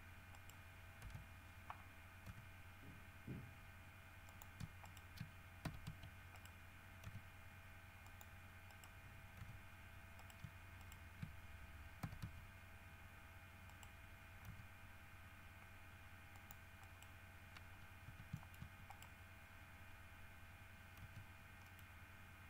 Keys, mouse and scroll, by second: 0.5 right click, 1.2 KP_3, 2.5 g, 4.5 click, 5.0 shift+right click, 5.8 shift+w, 6.1 s, 6.5 right click, 7.2 g, 8.3 click, 8.9 right click, 9.6 g, 10.4 shift+right click, 11.0 shift+right click, 12.2 w, 12.4 s, 13.9 right click, 14.7 g, 16.5 click, 17.0 right click, 18.2-18.5 scroll down 3, 18.5 shift+middle click, 19.1 shift+right click, 19.5 shift+scroll up 3, 21.2 g, 21.8 middle click.